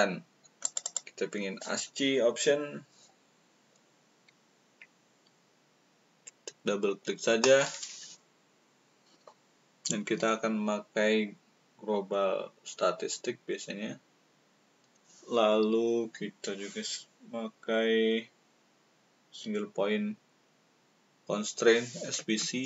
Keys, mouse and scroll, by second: 0.5 click.